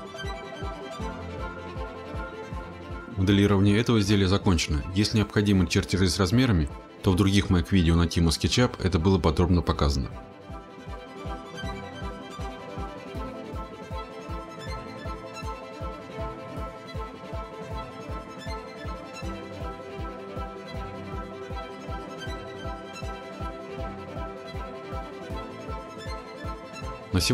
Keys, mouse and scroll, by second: 1.3 scroll, 1.9-3.0 scroll, 5.1-6.5 scroll, 6.5 scroll, 6.8 click, 9.4 scroll, 10.7 click, 14.1-15.2 scroll, 15.9-16.3 scroll, 21.1 click, 21.6 scroll, 24.7 click.